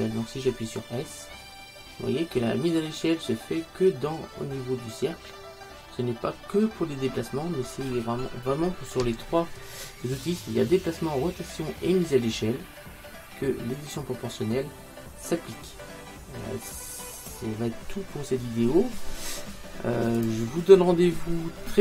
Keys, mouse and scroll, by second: 0.5 s.